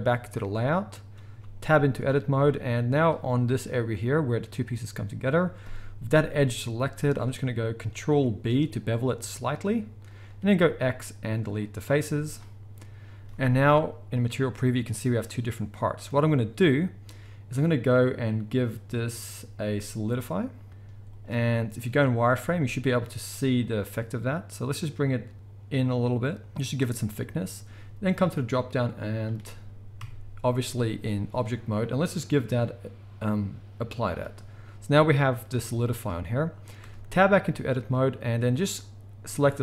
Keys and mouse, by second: 0.0-1.2 middle drag, 1.3 Tab, 2.9 click, 6.7 z, 8.4 ctrl+b, 9.2-18.7 shift+middle drag, 10.5 x, 12.0 z, 13.3 z, 18.7-38.7 drag, 20.7 z, 30.0 Tab, 35.6 z, 36.8 Tab, 38.7-39.6 middle drag.